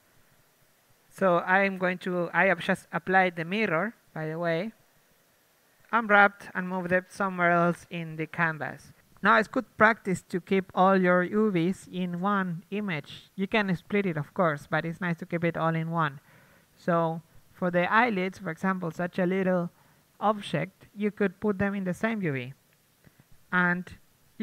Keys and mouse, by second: 2.2 click, 2.5 Tab, 2.7 a, 3.0 a, 4.0 Tab, 4.3-7.8 typing, 4.6 ctrl+z, 4.8 ctrl+z, 5.1 Tab, 5.8 ctrl+Tab, 8.7 Tab, 9.3-11.6 middle drag, 13.2 KP_1, 13.6 Tab, 13.8 a, 13.9 a, 14.2 Tab, 15.7 Tab, 16.1-18.9 typing, 17.6-18.7 drag, 18.9-21.1 drag, 20.0 Tab, 20.3 Tab, 21.1 Tab, 21.5 Tab, 21.5 g, 22.0 r, 22.7 s, 23.0 Tab, 24.2 Tab.